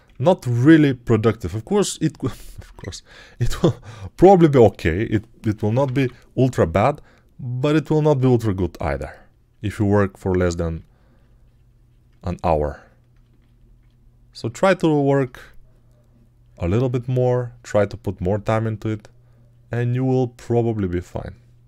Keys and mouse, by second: 5.7 click, 5.7 [, 5.8 [.